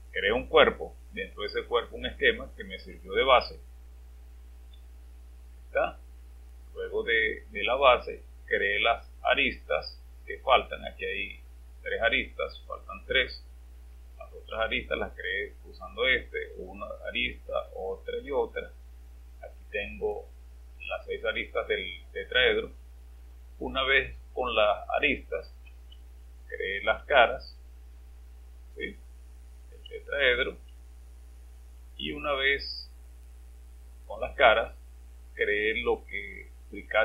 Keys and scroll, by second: 4.9-5.6 typing, 15.3 space, 17.3 typing, 18.4 typing, 26.0 space, 27.0 typing, 29.9-31.5 typing, 36.6 space.